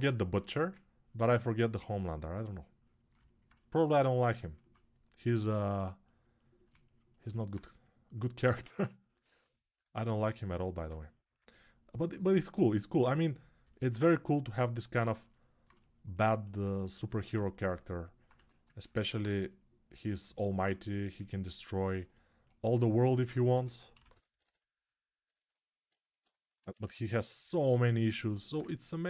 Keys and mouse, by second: 5.1 x, 7.3-13.6 drag, 13.6-16.9 right drag, 16.9-22.9 alt+drag, 23.3 g, 23.7 ], 23.9 ], 26.5-29.0 right drag, 26.6 1.